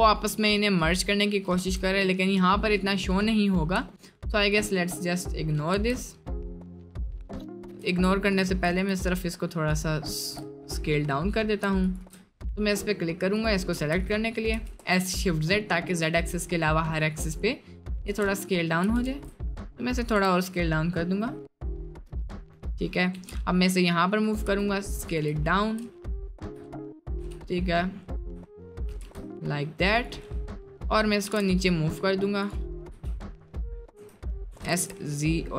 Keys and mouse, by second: 1.1 middle click, 1.6 Tab, 2.0-2.5 middle drag, 2.8 middle click, 3.8 s, 5.8 Tab, 6.3 middle click, 7.0 middle click, 7.7 3, 7.8 click, 8.3 shift+click, 10.5 middle click, 11.9 alt+shift+click, 12.3 middle click, 13.4 click, 14.0 s, 14.6 s, 16.8 middle click, 17.3 Tab, 17.7 click, 18.1 Tab, 18.9 s, 20.2 Tab, 20.6 drag, 21.5 click, 23.1 g, 24.5 s, 25.5 shift+middle drag, 26.3 shift+middle drag, 27.2 g, 28.4-28.7 shift+middle drag, 29.1 s, 30.2-30.5 middle drag, 31.3 g, 32.8 KP_Decimal, 33.6 middle drag, 34.0 s, 34.5 s.